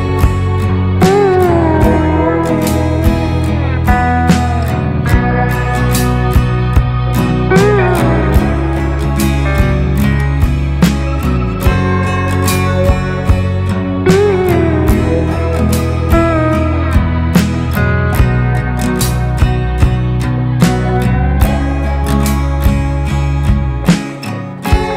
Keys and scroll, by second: 7.0 ctrl+z, 11.9 ctrl+x, 12.6 ctrl+f.